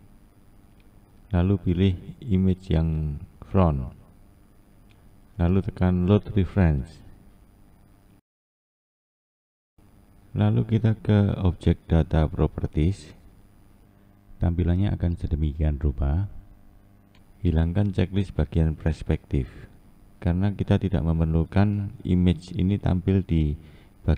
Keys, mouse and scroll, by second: 10.8-11.8 scroll up 2, 11.8 scroll up 3, 12.1 scroll down 1, 12.6-13.0 scroll up 4, 14.1 click, 17.2-20.2 scroll up 2, 20.7-24.1 drag.